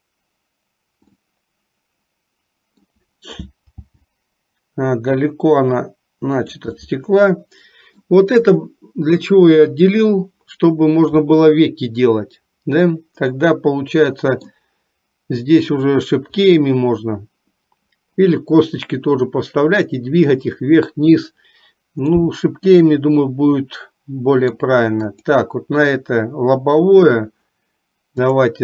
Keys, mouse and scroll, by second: 1.3-3.3 middle drag, 4.0 g, 7.1-8.3 middle drag, 13.5-14.7 middle drag, 22.4-24.8 middle drag, 25.4 click.